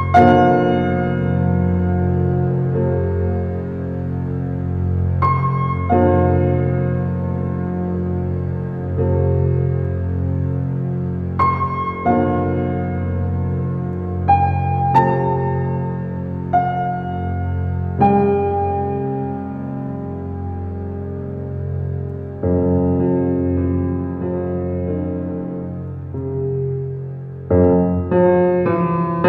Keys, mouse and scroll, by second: 2.2-4.0 middle drag, 4.0 click, 4.6-5.3 middle drag, 5.3 click, 6.2 s, 8.3 click, 8.7 scroll up 1, 8.8-10.6 middle drag, 11.0 click, 11.9-13.9 drag, 15.6 click, 16.1-17.2 middle drag, 17.8 scroll up 6, 18.1 shift+middle click, 18.4 scroll up 3, 18.7-19.2 shift+middle drag, 19.2 click, 20.3 shift+d, 23.3 g, 25.0 middle click, 25.8 click, 26.2 click, 26.6-27.4 middle drag, 27.4 g.